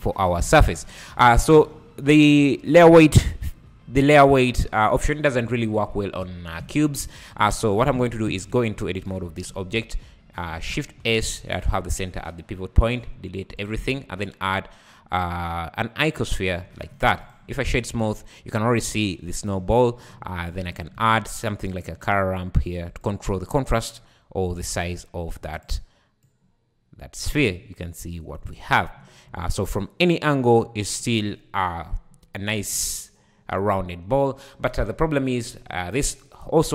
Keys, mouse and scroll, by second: 1.2 `, 5.5 `, 6.6 `, 7.9 Tab, 8.3 `, 9.5 x, 10.8 shift+s, 12.8 x, 13.9 shift+a, 16.6 Tab, 16.9 right click, 17.5 `, 18.0 `, 18.6 `, 20.5-20.9 drag, 20.9 shift+a, 24.6-27.5 drag, 27.5 `, 36.3 z, 36.4 `.